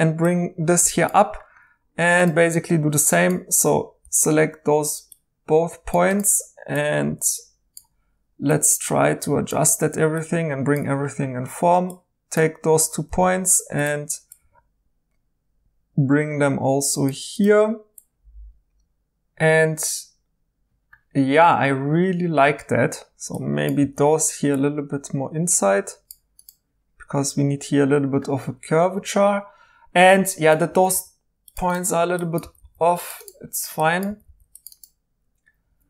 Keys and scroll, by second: 2.9 1, 4.0 g, 13.1 g, 18.8 typing, 23.8 g, 30.7 typing, 32.4 g, 34.0 g, 35.7 2.